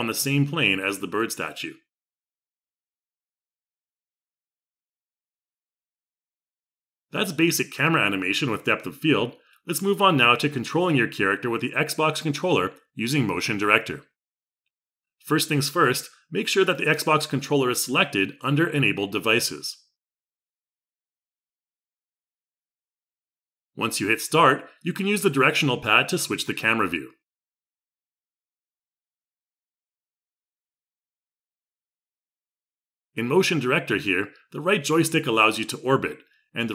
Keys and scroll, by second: 32.0 Left.